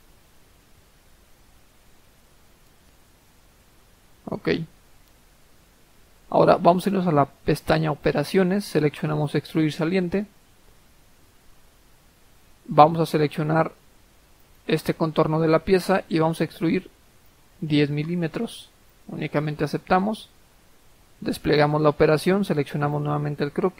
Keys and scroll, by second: 1.0-1.9 typing, 2.1 Return, 3.5 Escape.